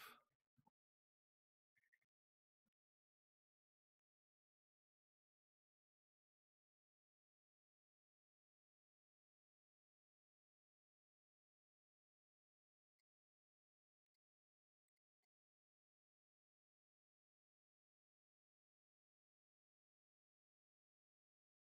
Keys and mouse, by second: 0.1 shift+click, 0.4 g, 1.8 click, 2.3 click, 2.4 g, 3.6 click, 4.9 g, 5.0-7.7 drag, 7.9 middle click, 8.5 shift+middle click, 9.3-12.8 drag, 13.0 g, 14.6 click, 14.8 x, 15.5 g, 16.8 middle click, 17.5 g, 19.0-21.6 drag.